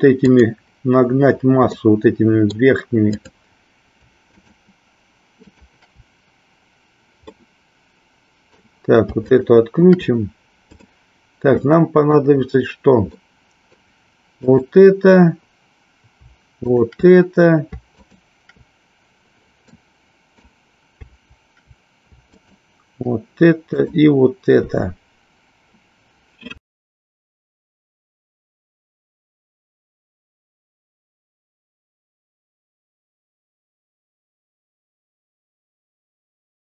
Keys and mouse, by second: 0.1 click, 1.8 middle click, 3.1 click, 4.3 shift+click, 5.4 shift+click, 7.3-8.6 middle drag, 9.3 shift+click, 10.7 click, 11.6 middle click, 13.3 middle click, 14.6 click, 16.6 shift+click, 18.1 shift+click, 19.8 middle click, 22.3 shift+click, 23.8 shift+click, 26.8 KP_1.